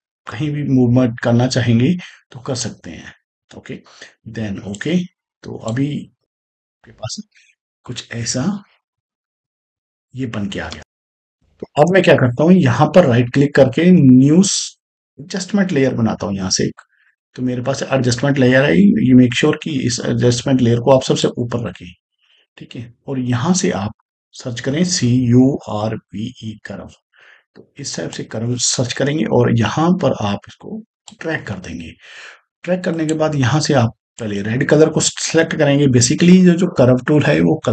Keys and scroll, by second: 6.1 space, 10.6 space, 24.6-26.3 typing.